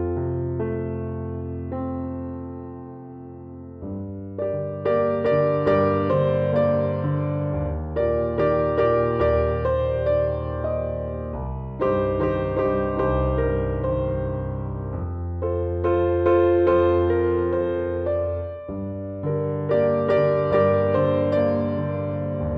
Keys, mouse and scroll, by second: 0.9 shift+a, 4.3 click, 5.2-9.0 drag, 9.0 middle click, 9.7-12.4 drag, 9.7-22.5 right drag, 14.1 s, 15.2 s, 17.2 s, 18.1 s, 20.9 click, 22.4 click.